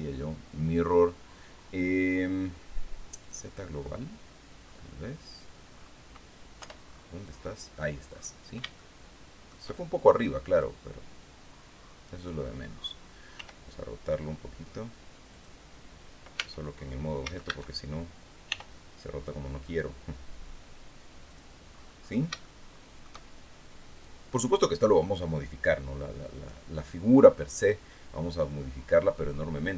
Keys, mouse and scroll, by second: 2.7 click, 4.0-4.5 scroll down 1, 4.8-5.2 scroll down 1, 6.1 Return, 6.3-7.1 scroll down 3, 7.6-7.9 scroll up 2, 8.3 shift+middle click, 10.1-11.7 drag, 12.8 r, 14.8 click, 15.9 Tab, 16.7 a, 18.0 r, 20.8 click, 21.2-21.8 scroll up 1, 21.8 shift+scroll up 1, 21.9 shift+click, 23.5-26.1 drag, 27.1-29.2 drag, 29.3 middle click.